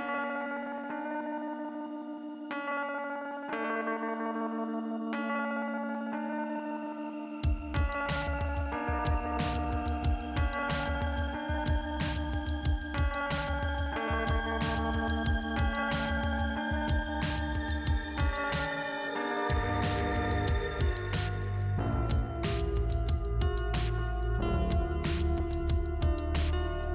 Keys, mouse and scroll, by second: 2.2 click, 5.3 click, 5.4 click, 7.3 click, 8.1 click, 10.1 click, 16.2 click, 16.2 click, 23.6 click, 25.0 click, 25.1 click, 25.7-26.3 scroll down 1.